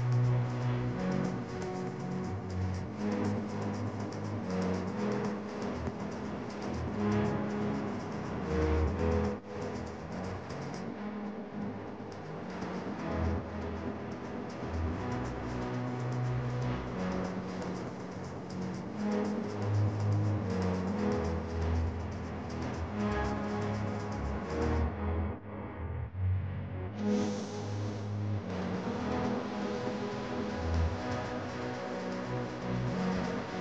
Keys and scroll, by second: 1.8 d, 3.0 alt+BackSpace, 13.3 ctrl+d, 22.8 b, 27.9 ctrl+j, 28.6 ctrl+t.